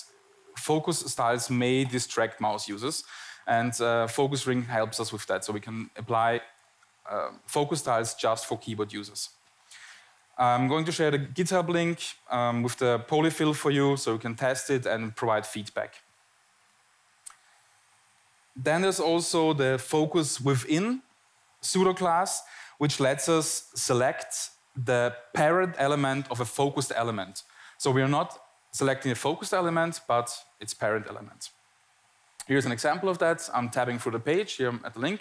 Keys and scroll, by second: 33.8 Tab.